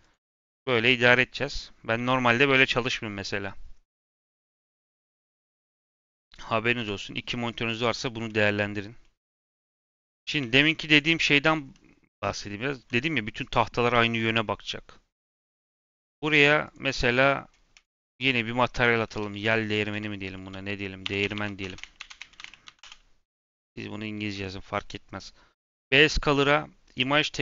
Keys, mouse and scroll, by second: 0.0 click, 0.9 middle click, 1.1-1.9 scroll up 5, 3.4 scroll down 1, 3.6-4.2 scroll up 1, 4.2-4.8 scroll down 4, 4.8 scroll up 4, 5.0-5.8 scroll down 5, 5.3 middle click, 5.8 middle click, 6.7 ., 7.1 scroll down 2, 7.3-8.7 middle drag, 8.7 scroll up 2, 8.9-9.7 middle drag, 9.7 click, 10.3 a, 10.8 click, 12.1 Tab, 12.7 Tab, 15.7-16.7 drag, 17.7-21.1 drag, 21.1 space, 21.3 space, 24.2-27.4 drag.